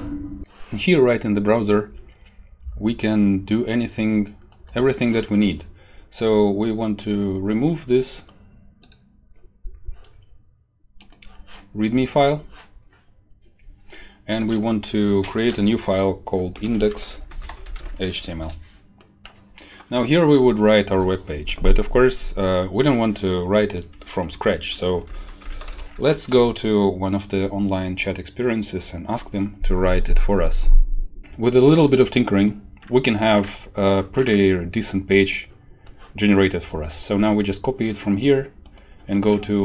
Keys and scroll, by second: 16.3-18.2 typing, 18.3 Return, 25.0 ctrl+t, 25.1-26.1 typing, 26.2 Return.